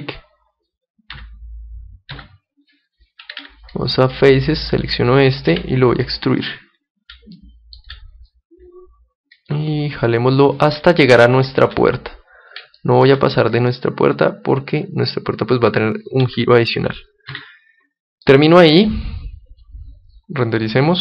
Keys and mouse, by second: 1.1 KP_3, 2.1 KP_7, 3.3 ctrl+Tab, 4.9-6.2 right drag, 5.5 e, 6.6-8.4 drag, 7.3 middle click, 8.0 middle click, 8.2-9.9 middle drag, 9.9-11.7 drag, 11.0-14.6 middle drag, 13.5-15.3 drag, 16.2 Tab, 17.3 KP_1, 18.2-21.0 middle drag.